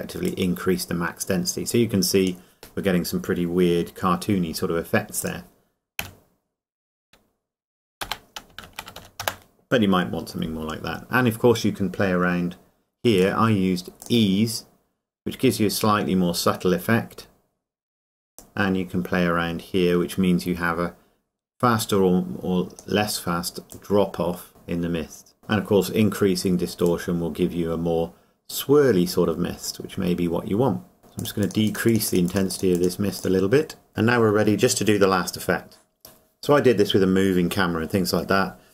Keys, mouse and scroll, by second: 0.3 click, 5.2 click, 6.0 KP_Decimal, 11.4 KP_Enter, 13.2 click, 18.4 click, 25.4 middle click, 25.6 scroll up 1, 26.9 click.